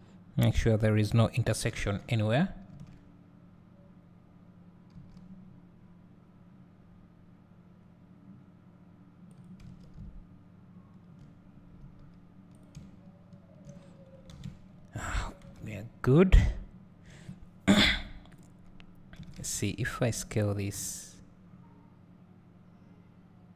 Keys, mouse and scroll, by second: 9.6 1, 9.8 1, 11.9 s, 13.2 click, 14.2 click, 14.2 scroll up 1, 14.3 alt+a, 16.0 scroll up 1, 18.4 click, 19.3 s.